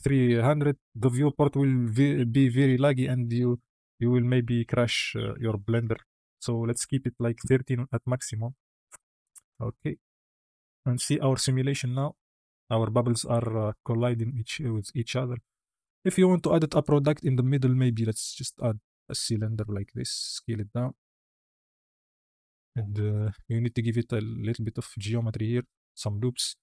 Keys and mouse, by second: 0.3 KP_0, 8.9-9.2 drag, 9.5 space, 15.6 space, 16.0 click, 17.3 shift+a, 19.7 s, 20.7 s, 21.5 s, 22.1 z, 22.9 Tab, 23.3 ctrl+r, 26.3 Tab.